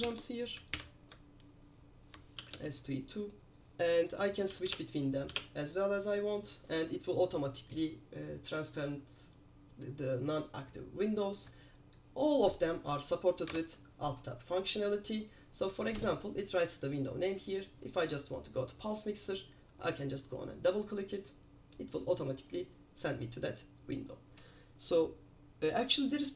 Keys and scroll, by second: 0.5 shift+p, 2.6 super+h, 4.4 super+j, 4.6 super+j, 4.8 super+j, 5.4 super+j, 13.7 alt+Tab.